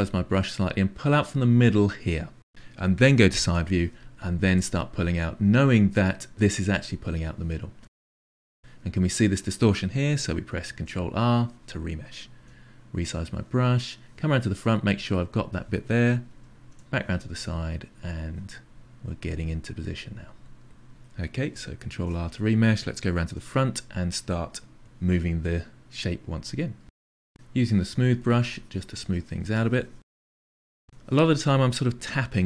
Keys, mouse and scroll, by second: 0.1-1.4 drag, 1.6 click, 2.2-3.4 drag, 3.4 KP_3, 4.3-5.4 drag, 5.6 click, 5.9-7.0 drag, 7.6-10.8 drag, 10.8 ctrl+r, 12.4 f, 13.4-14.5 middle drag, 14.5 click, 16.6 KP_3, 17.3 click, 18.0 click, 18.7-21.8 drag, 22.0 ctrl+r, 23.3 KP_1, 23.9 f, 24.1 click, 24.9 ctrl+middle click, 25.6 f, 26.0 click, 26.3 click, 26.6 click, 27.5 shift+click, 28.2 shift+click, 28.7 click, 29.1-31.1 drag, 31.5-32.4 drag.